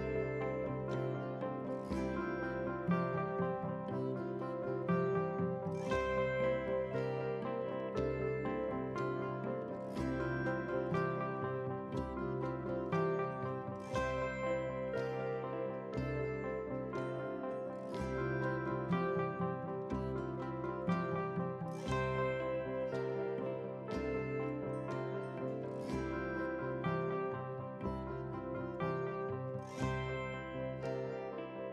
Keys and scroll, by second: 3.9 ctrl+a, 4.8 ctrl+c, 5.8 ctrl+c, 9.6 ctrl+v, 15.6 ctrl+t.